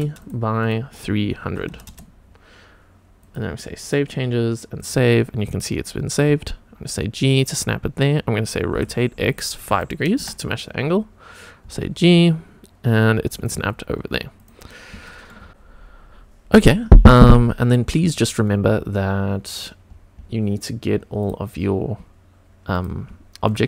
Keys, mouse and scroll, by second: 0.6-3.3 drag, 1.8 KP_0, 3.8 click, 4.7 click, 6.2 g, 7.3 click, 7.6 scroll up 1, 8.7 r, 9.1 x, 9.6 KP_5, 10.1 Return, 11.6 g, 13.3 click, 13.6-14.4 scroll down 1, 14.4 click, 14.4 scroll down 1, 14.7 scroll up 1, 15.0 shift+middle click, 18.4-19.0 scroll down 3, 19.0-19.6 scroll down 2, 19.5-20.4 scroll up 6, 20.4-21.1 scroll down 2, 21.1 click, 21.6-21.9 scroll down 2, 22.7 click, 23.4 shift+click.